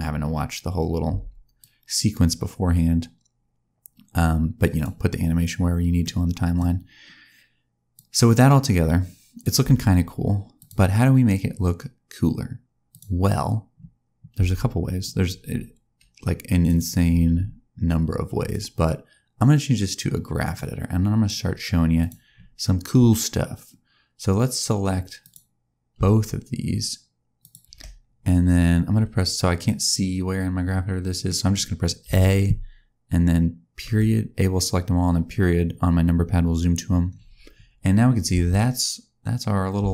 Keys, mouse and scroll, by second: 0.5 scroll up 2, 1.0 space, 1.5 click, 5.4-5.9 scroll down 1, 5.9 middle click, 7.8 click, 9.5 space, 10.5 click, 12.8 click, 14.2 space, 16.5 click, 21.2-21.8 scroll down 1, 21.8 click, 25.1 click, 27.3 shift+click, 29.5-31.5 scroll down 1, 31.5 middle click, 31.9 a, 33.7 KP_Decimal, 36.9-37.5 scroll down 1, 37.5-37.8 scroll down 4, 37.8-38.2 scroll down 2, 38.2 space, 39.8 shift+scroll down 1, 39.8 shift+middle click.